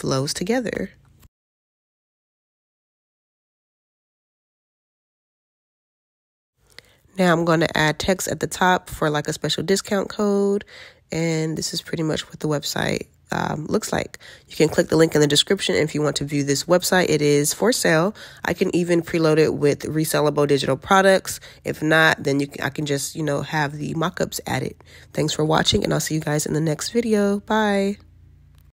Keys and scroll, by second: 25.5 alt+q.